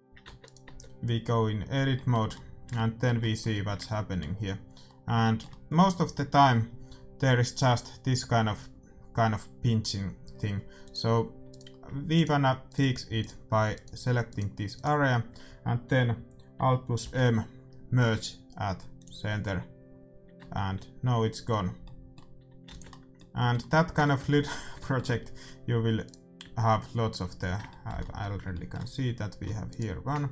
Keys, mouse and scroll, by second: 0.2 Tab, 1.3 Tab, 2.3 middle click, 5.6-10.2 middle drag, 10.8-12.7 drag, 11.6-16.5 right drag, 17.0 alt+m, 20.8 Tab, 21.8-24.3 middle drag, 22.3 a, 22.6 ctrl+s, 26.3 right click, 26.9 Tab, 29.7-30.3 right drag.